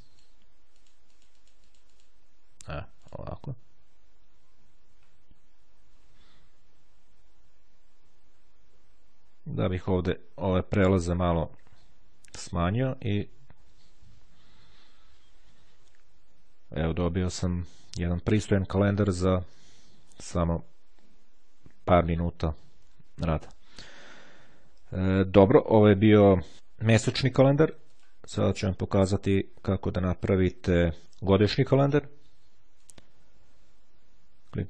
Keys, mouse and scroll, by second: 0.7-2.7 drag, 3.2 click, 8.1-9.5 ctrl+scroll up 1, 10.7-11.9 ctrl+scroll down 1, 12.4-13.1 ctrl+scroll down 1, 27.1-28.7 drag, 29.9-31.3 drag, 31.7 click, 32.9 click.